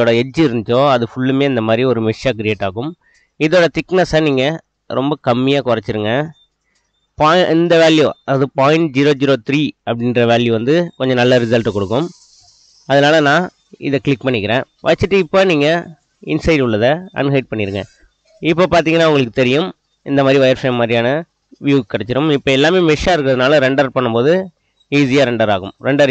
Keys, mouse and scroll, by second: 0.7-1.9 middle drag, 3.3-5.1 drag, 10.9-11.2 middle drag, 16.2 click, 17.1-17.8 middle drag, 18.7-19.2 middle drag, 19.6 middle drag, 25.0-26.1 drag.